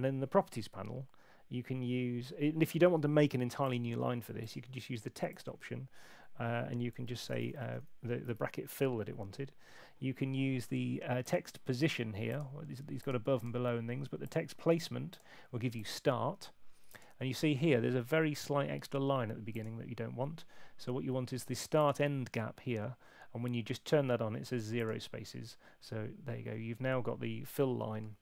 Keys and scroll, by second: 7.1-8.0 typing.